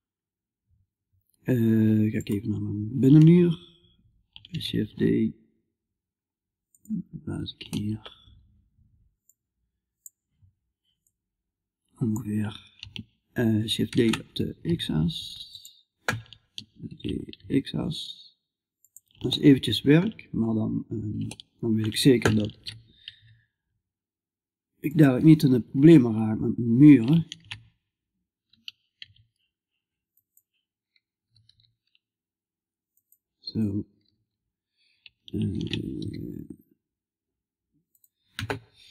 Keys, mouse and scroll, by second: 4.1 shift+d, 6.6 middle click, 7.1 click, 7.6-8.7 middle drag, 8.7-13.3 drag, 13.3 shift+d, 19.0-22.0 middle drag, 22.0 shift+d, 26.8 shift+d, 30.7 g, 35.0 shift+d.